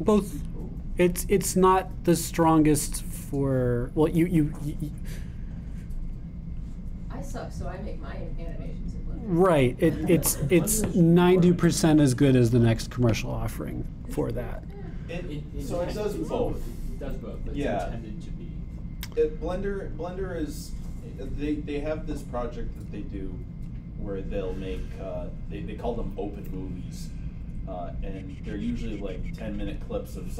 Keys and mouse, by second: 27.5-30.3 drag.